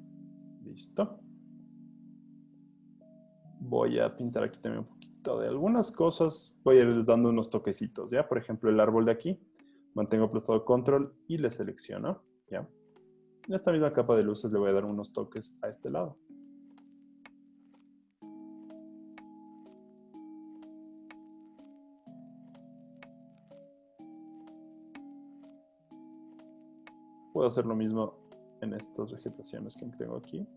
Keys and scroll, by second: 1.4 super+d, 14.4 super+z, 17.6 alt+super+z, 20.3 super+d, 23.5 alt+super+z, 24.5 super+d.